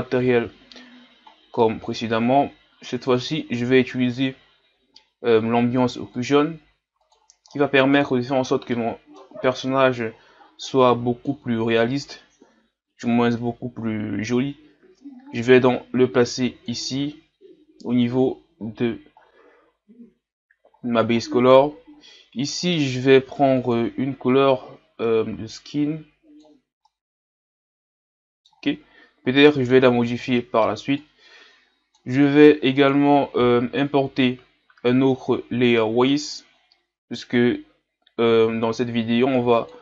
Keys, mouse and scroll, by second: 0.0-16.9 drag, 23.6 click, 26.9-28.8 middle drag, 28.8-29.4 scroll down 1, 29.4-29.9 scroll down 1, 29.9-32.7 scroll down 1, 32.7-34.0 scroll down 1, 34.0-35.3 scroll down 1, 35.3-36.7 scroll down 1, 36.7-38.0 scroll down 1, 38.0-39.4 scroll down 1, 39.4-39.8 scroll down 1.